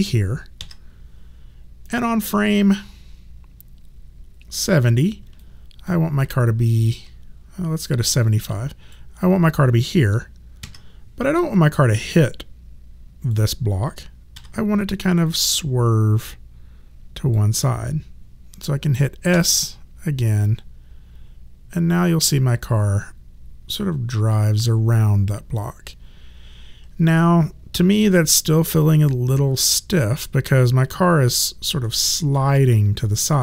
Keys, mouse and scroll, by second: 0.6 s, 1.9 click, 5.4 alt+click, 6.2 alt+middle click, 7.9 click, 10.6 s, 11.3 click, 14.3 w, 15.3 click, 19.3 s, 20.5 click, 31.8 alt+middle click.